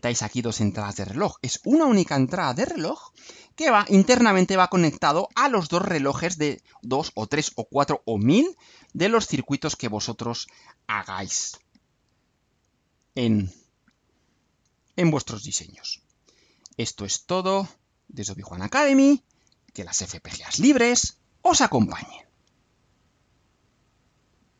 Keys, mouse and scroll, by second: 9.8-10.1 scroll down 2, 10.7 scroll up 2, 12.9 click, 23.4 click, 24.5 click.